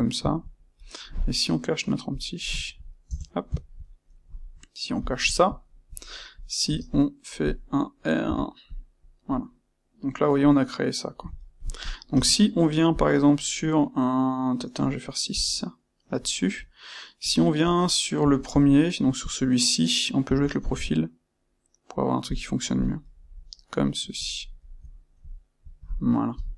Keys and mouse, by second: 0.2-2.0 ctrl+middle drag, 2.0 click, 2.6-4.9 ctrl+middle drag, 3.0 Tab, 4.9 click, 5.6-6.3 ctrl+middle drag, 6.3 click, 8.6 space, 9.3-11.7 middle drag, 11.7 click, 12.1 space, 15.2 space, 22.8 click, 23.0-26.5 middle drag, 26.3 KP_1.